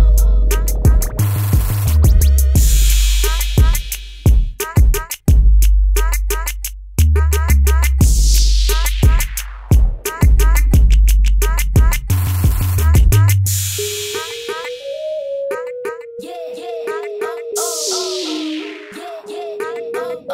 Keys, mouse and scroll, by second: 1.7 Up, 2.7 Down, 5.7 click, 9.9 click, 17.7 right click.